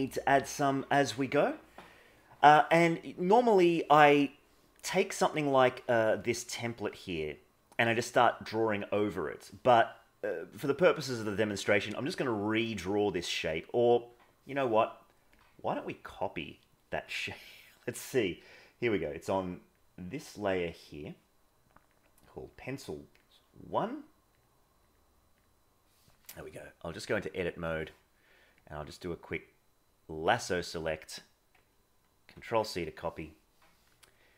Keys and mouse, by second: 4.4-4.8 middle drag, 9.8-10.2 middle drag, 10.9-11.5 middle drag, 27.1 click, 28.7-30.3 drag, 32.3 ctrl+c.